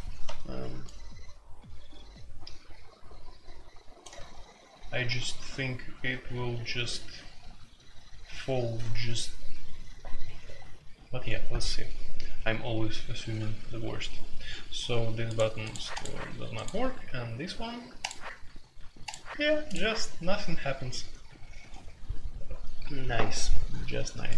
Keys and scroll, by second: 0.0-0.1 typing.